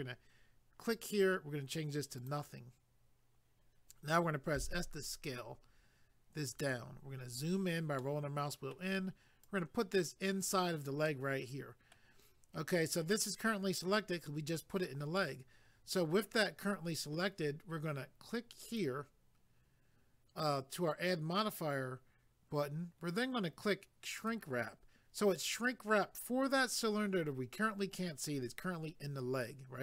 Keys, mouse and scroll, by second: 0.8 click, 2.1 click, 6.5 click, 7.0 scroll up 1, 8.0 middle click, 9.4 click, 11.1 middle click, 18.7 click, 24.2 click.